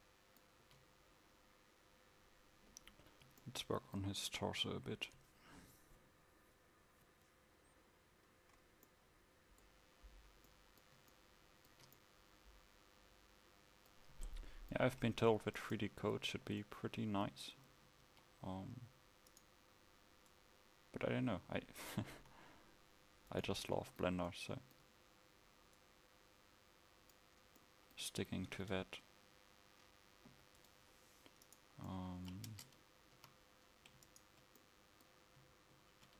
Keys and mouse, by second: 18.0 shift+d, 30.3 Delete, 32.6 Tab, 33.3 a.